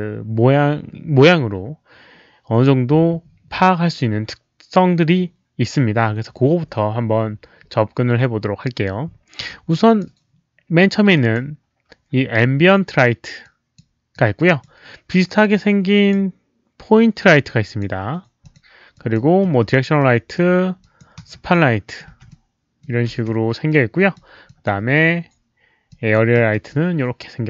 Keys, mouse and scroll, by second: 9.7 drag, 11.1 drag, 13.4-13.7 drag, 14.1-14.6 drag, 15.5-16.1 drag, 17.3-17.8 drag, 18.4 click, 18.9 drag, 19.4 e, 19.9-20.3 drag, 20.8 drag, 21.2-24.8 typing, 21.5 click, 22.3-22.8 middle drag, 23.7 click, 23.7 middle click, 24.4 drag, 25.9 drag, 26.3 e, 26.7-27.4 drag.